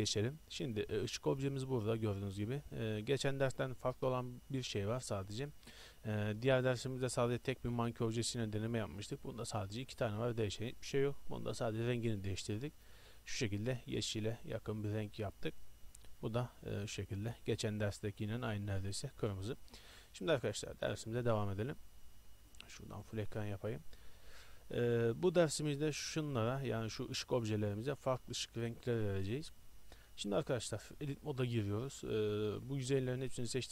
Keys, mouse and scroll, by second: 1.0 g, 7.4-9.3 right drag, 10.6-11.0 middle drag, 15.6-16.6 drag, 16.6-19.1 right drag, 20.0-21.7 middle drag, 21.7 middle click, 22.8-24.5 drag, 24.5-25.2 middle drag, 26.7 right drag, 26.8 middle drag, 27.0 g, 27.3 right drag, 27.4-28.2 right drag, 30.3 middle click, 30.4 middle click, 31.0 Tab.